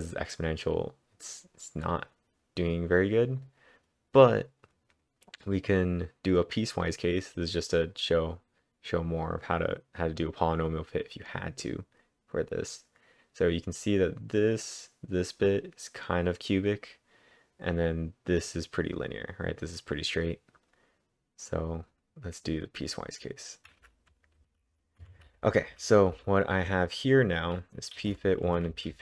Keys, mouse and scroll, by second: 3.4-7.1 drag, 4.7-5.4 typing, 6.5-7.2 typing, 21.5-22.9 drag, 22.9-24.4 drag, 23.8-27.1 typing, 24.4 ctrl+/, 24.4 ctrl+j, 24.4 ctrl+v.